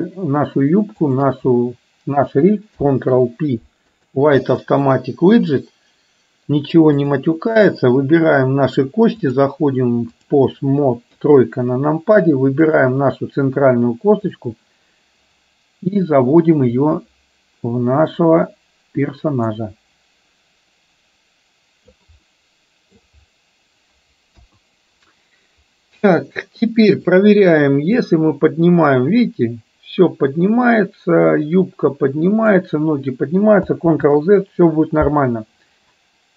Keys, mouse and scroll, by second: 1.1 shift+click, 2.8 ctrl+p, 9.3-11.6 drag, 11.6 KP_3, 12.8 click, 14.3 click, 15.7-22.1 drag, 22.4-23.1 middle drag, 24.4 KP_1, 27.1 click, 28.3-32.8 drag, 34.1 ctrl+z.